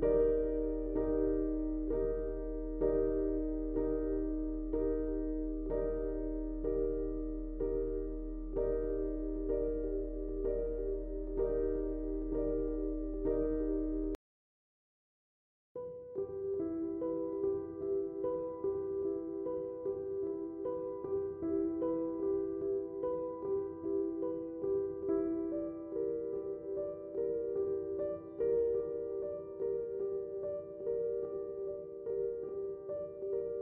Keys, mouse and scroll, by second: 1.5 typing, 4.8 typing, 5.6 click, 6.1-9.4 shift+drag, 9.7 space, 9.8 click, 10.1 space, 10.7 click, 12.4 scroll up 1, 13.2 click, 13.5 space, 13.9 click, 17.3 space, 17.4 click, 18.5 space, 18.6 click, 18.9 space, 20.5-24.1 drag, 24.5 space, 24.8-29.6 drag, 29.6-33.6 drag.